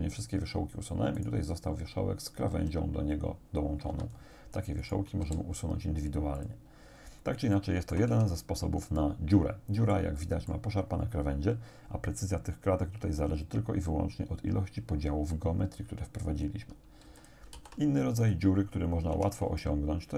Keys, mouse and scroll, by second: 1.2 right click, 2.5 g, 3.9 Escape, 4.9 shift+right click, 5.3 shift+x, 6.4 click, 6.9-7.6 scroll down 3, 7.6 shift+middle click, 8.1 shift+Tab, 9.0-10.1 middle drag, 10.3 middle click, 10.4 click, 17.1 x, 17.2 click, 17.7 shift+a, 18.3 click, 19.1 Tab, 19.7-20.1 shift+drag.